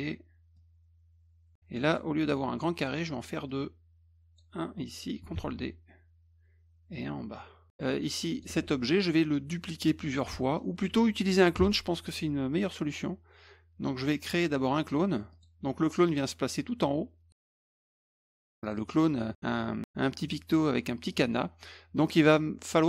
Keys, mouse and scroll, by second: 0.5 click, 1.9 click, 3.5-4.4 drag, 5.3 ctrl+d, 6.9-8.4 drag, 8.5 ctrl+z, 8.8 middle click, 10.3 middle click, 15.3 click, 18.0 click, 18.6 click, 21.1 click.